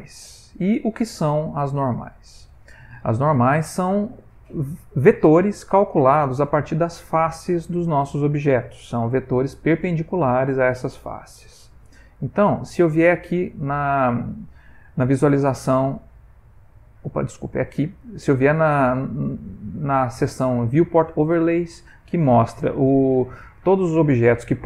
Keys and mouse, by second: 0.1 click, 1.2 ctrl+middle click, 1.8 ctrl+middle click, 2.3 shift+middle click, 2.5 shift+middle click, 6.9 middle click, 7.4 middle click, 8.3 Tab, 9.4 middle click, 12.1 click, 17.6 click.